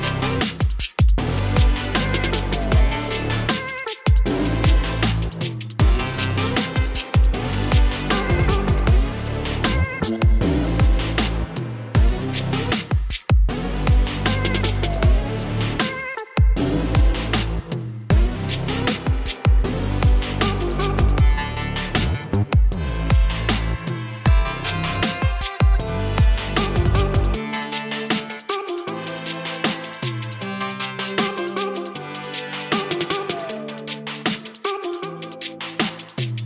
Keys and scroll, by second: 1.6-2.0 typing, 8.9-9.4 typing, 11.8 space, 14.9 ], 15.4 [, 15.5 [, 15.8 [, 19.8 ctrl+alt+shift+e, 21.2 ctrl+j, 22.3-22.6 typing, 23.9-24.6 typing.